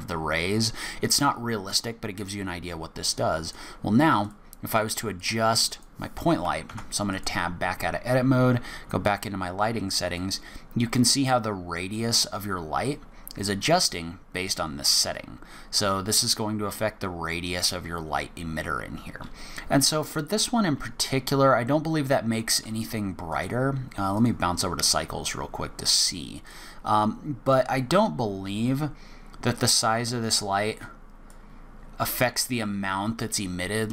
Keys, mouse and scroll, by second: 3.4 click, 4.3 click, 4.7 click, 5.2 click, 5.6 click, 6.7 Tab, 7.1 click, 9.1 click, 10.1 click, 22.5 click, 23.3 click, 26.4 click, 30.2 click.